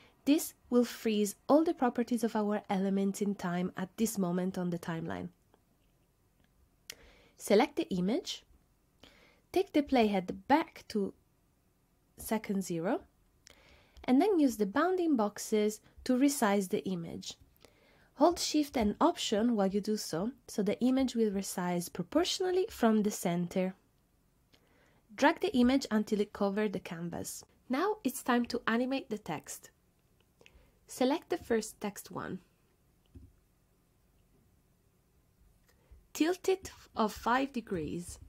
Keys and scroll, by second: 37.8 5, 38.1 Return.